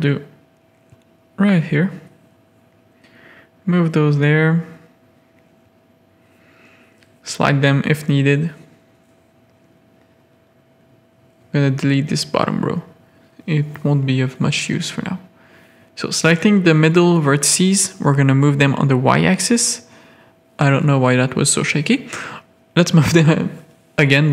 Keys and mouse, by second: 0.5 alt+click, 0.9 middle click, 2.3 ctrl+click, 3.0 click, 4.1 middle click, 5.2-6.8 drag, 7.0 click, 7.5 click, 8.5 z, 8.7 a, 10.1 x, 11.3 a, 11.6 z, 11.8 middle click, 12.5 middle click, 13.2 click, 13.6 middle click, 13.8 z, 14.1 a, 14.2 middle click, 14.8 click, 16.9 KP_7, 18.4 click, 19.8 z.